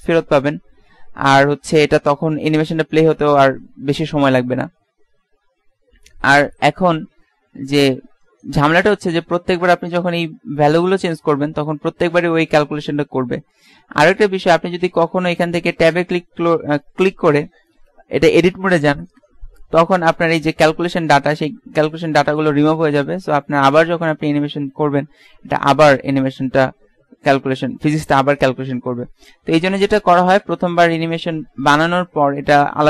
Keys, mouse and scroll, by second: 14.1 Escape, 19.7 Tab, 20.8 Tab, 22.0 click, 26.1 alt+a, 27.9 Escape.